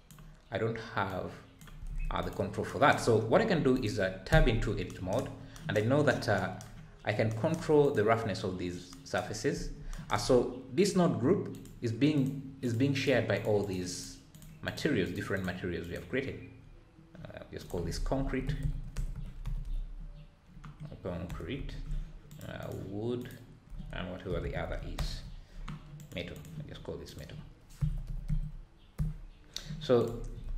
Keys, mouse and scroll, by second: 1.2-8.4 drag, 8.4-8.8 scroll up 3, 12.2 click, 12.9 click, 13.6 click, 14.0 click, 14.6 click, 15.4 click, 15.9 click, 22.3 click, 24.4 o, 26.4 click, 28.1-30.0 drag.